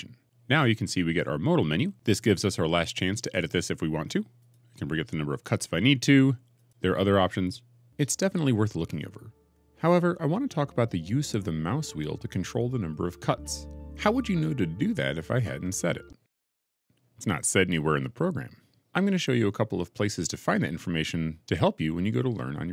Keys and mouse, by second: 4.2 click, 6.4 click, 17.4 middle click.